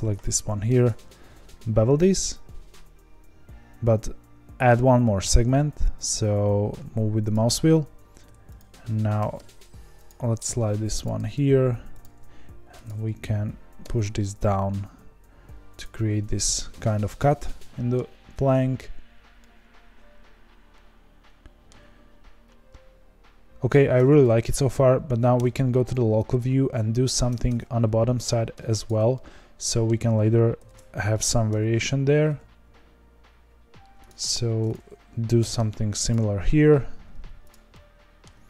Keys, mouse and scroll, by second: 0.6 ctrl+b, 7.8 1, 8.5 click, 9.2 g, 11.0 click, 11.2 g, 12.3 2, 12.8 click, 13.8 g, 16.4-18.2 middle drag, 18.2 Tab, 18.6-19.4 scroll down 2, 19.4-21.9 middle drag, 21.9-24.7 scroll up 2, 25.3 KP_Divide, 26.3-27.4 middle drag, 27.4 Tab, 27.8-28.8 scroll up 1, 28.8 click, 29.1-30.5 middle drag, 30.5 ctrl+b, 34.3 1, 34.7 click, 35.4 g, 36.8 2, 37.4 click, 37.7 middle click, 38.3 1.